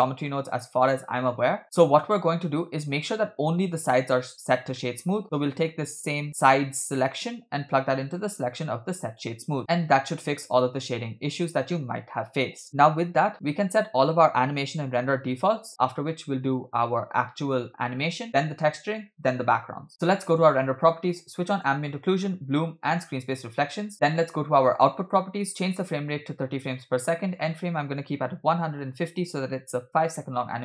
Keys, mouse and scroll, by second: 0.8-1.6 drag, 1.6-2.3 middle drag, 2.5-4.4 scroll up 2, 4.6-5.2 scroll down 2, 4.7-5.2 middle drag, 6.3-9.3 drag, 9.6-10.2 middle drag, 9.6 scroll down 3, 10.7-11.1 scroll down 2, 11.1-11.5 scroll up 2, 11.7 shift+middle click, 20.3 click, 21.6 click, 22.1 click, 23.8 click, 24.7 click, 25.7-27.0 drag, 27.3-29.3 drag, 30.4-30.6 scroll down 1.